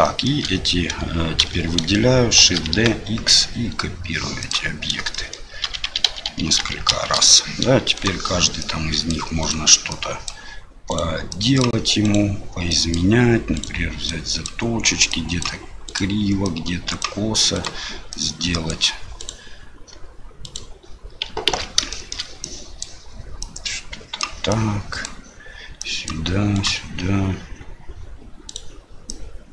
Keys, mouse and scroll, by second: 0.0 shift+middle click, 2.4 shift+d, 5.1 shift+middle click, 5.6-6.9 typing, 8.7 click, 9.9 click, 11.3 click, 12.7 click, 13.5 right click, 14.1 click, 15.1 click, 16.4 click, 17.5 right click, 18.1 click, 20.4 right click, 21.5 ctrl+z, 21.9 shift+middle click, 22.5 click, 23.4 click, 24.6 click, 25.8 click, 29.1 click.